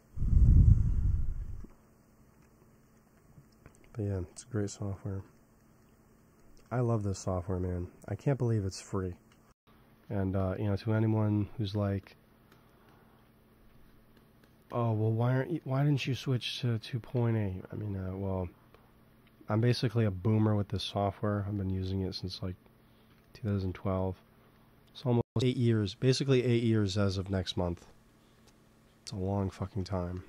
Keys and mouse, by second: 1.3 ctrl+s, 7.2 f, 7.6 f, 8.0 click, 9.3 ctrl+z, 11.2-16.6 drag, 14.9-16.7 middle drag, 17.0 ctrl+s, 18.1 KP_3, 26.6 g, 26.8 f, 27.6 f, 28.3-29.6 drag.